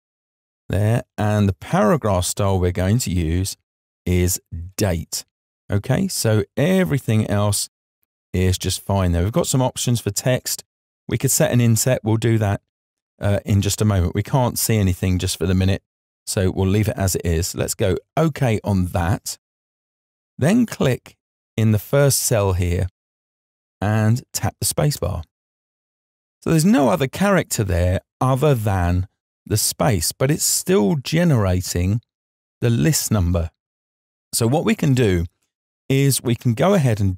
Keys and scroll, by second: 23.7 space.